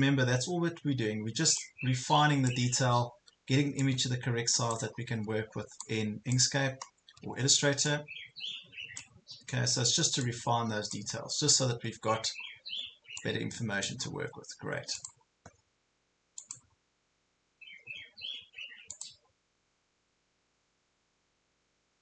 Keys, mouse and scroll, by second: 2.9 ctrl+scroll up 1, 3.9 click, 4.9 ctrl+scroll up 1, 5.8 click, 6.5 ctrl+scroll down 1, 7.9 click, 9.5 ctrl+scroll up 1, 10.2 click, 11.3 ctrl+scroll down 1, 14.1 ctrl+scroll down 1, 15.0-22.0 drag.